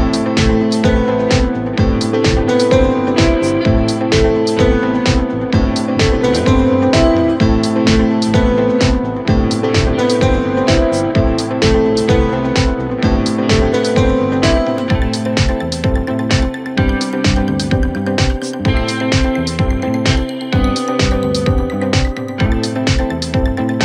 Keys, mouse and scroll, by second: 0.6-1.7 drag, 2.8-4.8 middle drag, 4.8 ctrl+r, 7.9 s, 10.1-11.8 drag, 11.8 s, 13.7 KP_1, 15.4 ctrl+r, 19.1 click, 21.7-22.2 scroll down 2, 22.2-22.6 scroll up 1, 22.6 Tab.